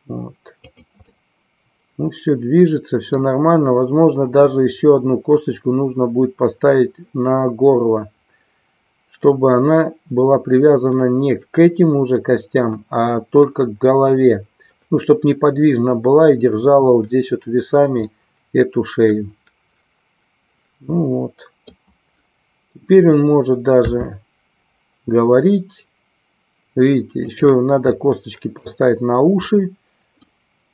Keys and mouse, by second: 0.8 click, 1.2-3.3 middle drag, 18.1-21.8 middle drag, 27.3 click, 28.0 middle click, 29.4-30.4 middle drag.